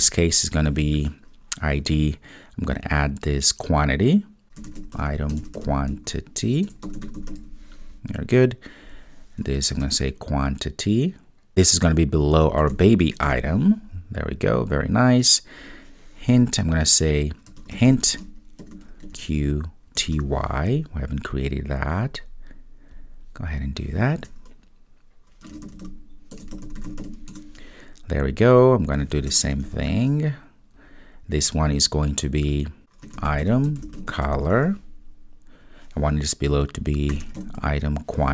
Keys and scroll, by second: 2.3 super+v, 13.3 Return, 29.8 super+v.